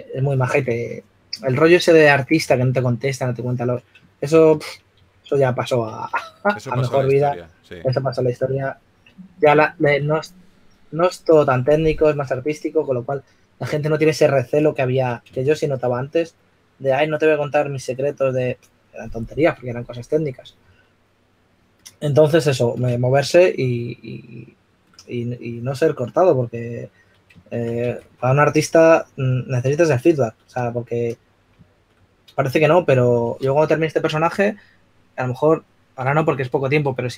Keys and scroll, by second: 3.7 s, 5.8-7.3 typing, 8.3 typing, 10.6 typing, 16.3 shift+s, 28.4 2, 33.8 s.